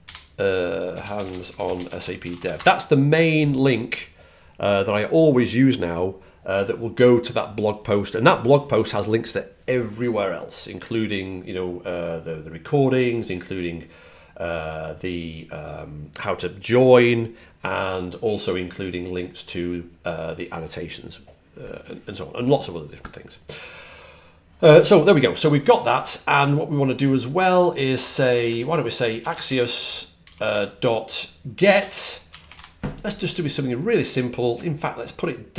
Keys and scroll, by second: 0.0-2.8 typing, 28.1-32.1 typing.